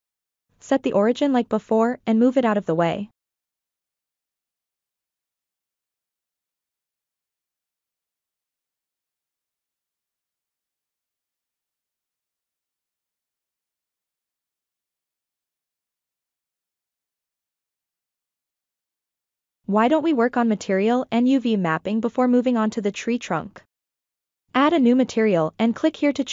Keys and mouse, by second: 0.1 click, 0.8 g, 1.1-3.9 drag, 4.5-6.2 drag, 7.7 Tab, 8.3 ctrl+middle drag, 9.5-10.6 drag, 11.5-12.6 middle drag, 13.2-13.5 shift+middle drag, 14.9-17.3 middle drag, 21.9 click, 24.8 click.